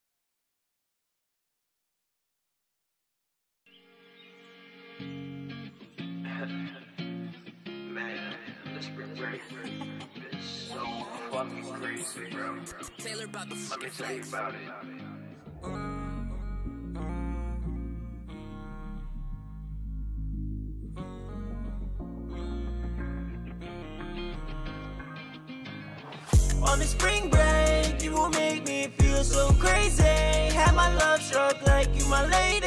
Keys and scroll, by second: 1.2 Return, 1.3 Return, 1.5 super+s, 2.0 Return, 2.1 Return, 2.9 super+space.